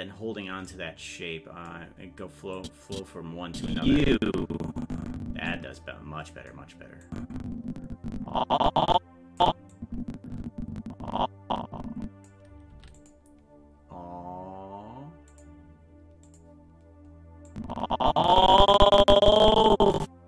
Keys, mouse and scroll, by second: 2.6-5.5 drag, 7.1-9.4 drag, 9.8-12.3 drag, 12.7 i, 15.3 click, 16.3 click, 17.5-20.2 drag.